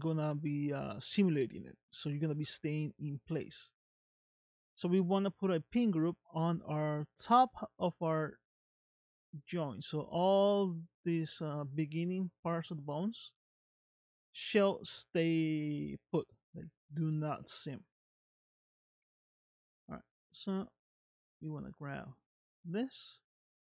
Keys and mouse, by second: 3.9 middle click, 6.0 middle click, 8.4 middle click, 12.5 middle click, 13.7 middle click, 14.9-16.5 middle drag, 17.2 middle click, 19.6 click, 20.3 shift+middle click, 21.3 click, 22.6-23.6 middle drag.